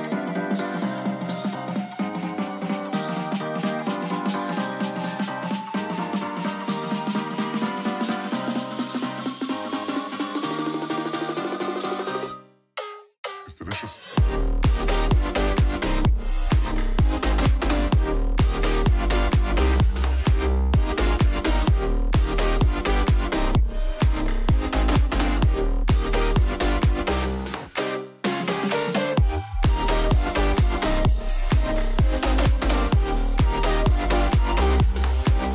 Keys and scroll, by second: 5.4 super+=, 8.5 alt+Down, 12.5 super+c, 12.6 super+v, 13.8 super+c, 15.7 alt+shift+Right, 16.5 super+v, 19.4 alt+shift+Right, 22.3 super+c, 23.5 shift+super+v, 29.9 ⟲, 32.7 super+c, 35.1 shift+super+v.